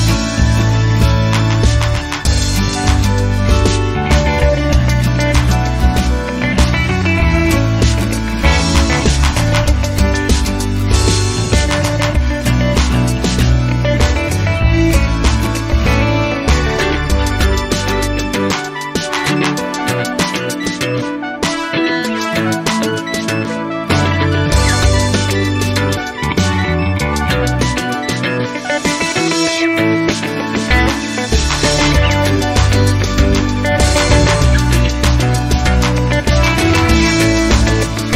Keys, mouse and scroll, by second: 0.7 click, 2.4 click, 3.4 KP_Subtract, 3.9 KP_2, 4.1 KP_5, 6.4 click, 7.5 KP_Subtract, 7.8 KP_1, 8.1 KP_0, 9.6 click, 13.0 click, 14.5 click, 15.7 click, 17.0 BackSpace, 18.6 click, 20.4 click, 22.0 click, 23.1 BackSpace, 25.0 click, 25.9-26.2 scroll down 2, 26.6 scroll up 2, 29.1 click, 31.2 click, 33.0 KP_2, 33.3 KP_5, 35.3 click, 36.3 KP_Subtract, 36.7 KP_1, 36.9 KP_0.